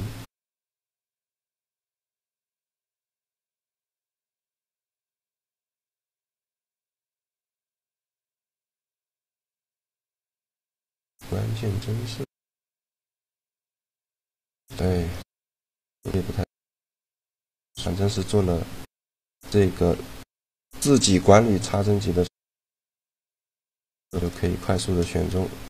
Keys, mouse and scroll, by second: 2.0-3.9 drag, 4.7-6.5 drag, 6.7-10.1 drag, 7.5-9.2 middle drag, 10.6-12.5 middle drag, 12.4-15.1 drag, 14.1 middle click, 15.1 middle click, 17.6 middle click, 18.5-20.6 right drag, 20.9-23.6 middle drag, 23.6-25.6 right drag, 24.4 shift+g.